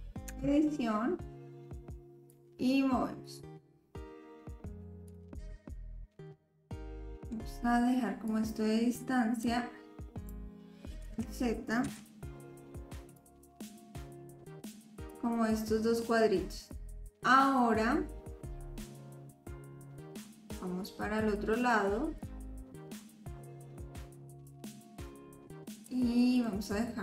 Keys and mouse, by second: 0.3 Tab, 2.3-5.0 drag, 5.1 click, 5.8-7.3 middle drag, 8.3-9.5 drag, 11.1 ctrl+z, 11.9 a, 13.2-15.1 drag, 16.9 click, 16.9 right click, 18.8-25.9 drag, 18.8 a, 26.5-27.0 drag, 26.5-27.0 right drag.